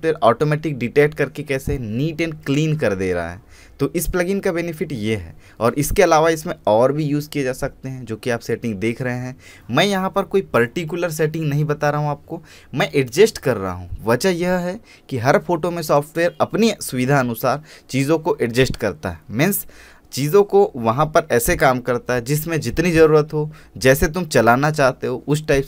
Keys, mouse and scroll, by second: 5.1-10.8 drag, 10.8-19.4 drag.